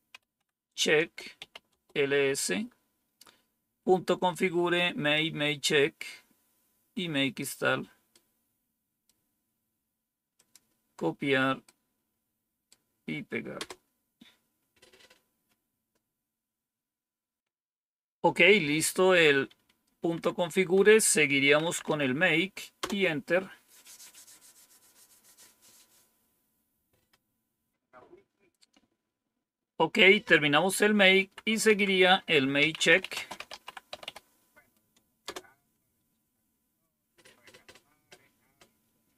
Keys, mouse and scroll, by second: 0.0-1.9 typing, 5.0-7.3 drag, 8.0-9.1 right drag, 10.3 click, 11.6-12.6 right drag, 13.5 Return, 19.4 Up, 20.0 Down, 21.1-22.3 typing, 22.7 Return, 31.1 Up, 31.6 Down, 32.3-34.4 typing.